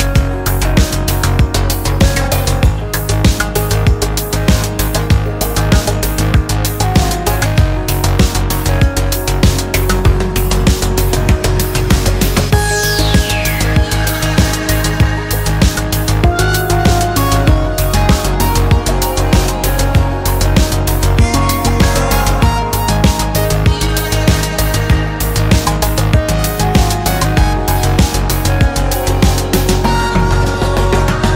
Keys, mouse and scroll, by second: 0.4 click, 1.9 click, 3.4 click, 5.1 click, 6.7-8.7 drag, 9.4-11.3 drag, 12.5 click, 14.2-15.9 drag, 17.0-18.5 drag, 19.3-20.6 drag, 21.5-23.4 drag, 24.7 Return, 26.4 click, 29.0 click, 29.5 click, 31.2 click.